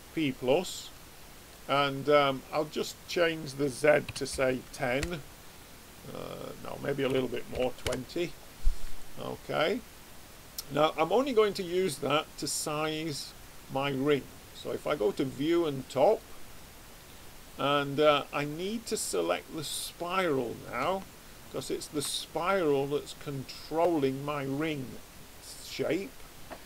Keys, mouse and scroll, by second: 0.9-2.6 middle drag, 2.6 click, 6.3 click, 8.9-11.2 middle drag, 14.7 click, 18.5-19.7 middle drag, 19.7 click, 21.5-22.8 middle drag.